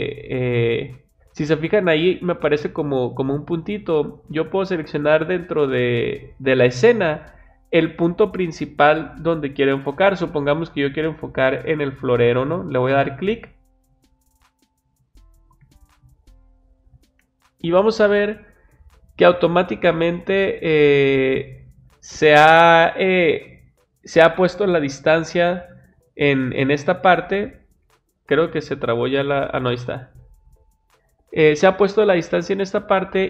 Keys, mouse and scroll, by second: 12.6 click, 27.4-28.0 drag, 31.7-33.1 middle drag.